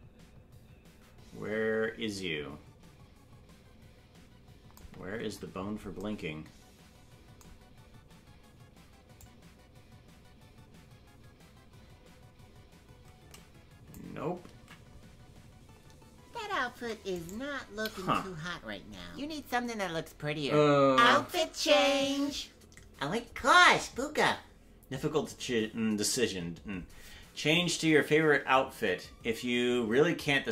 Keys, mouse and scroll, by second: 6.0 ctrl+Tab, 9.2-13.9 drag, 16.8 ctrl+z, 16.8 ctrl+Tab, 17.2 right click.